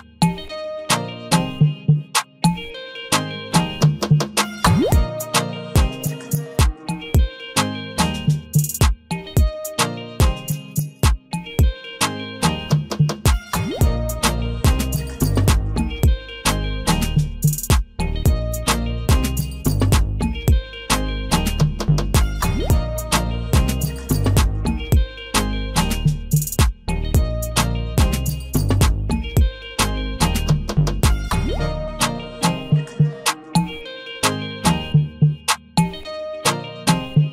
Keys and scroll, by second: 29.0 ctrl+z.